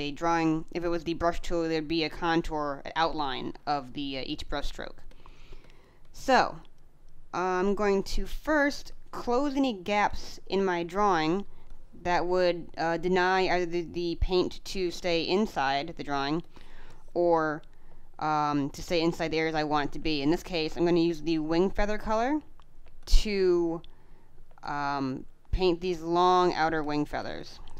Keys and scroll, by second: 3.3 space, 16.1 space, 19.8 space, 22.7 space, 24.5 space, 26.6 space.